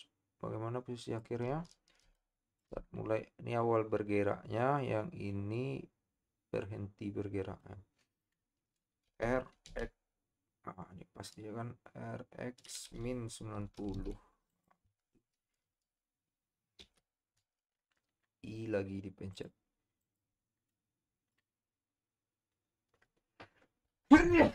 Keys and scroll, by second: 9.3 r, 9.7 x, 17.0 |.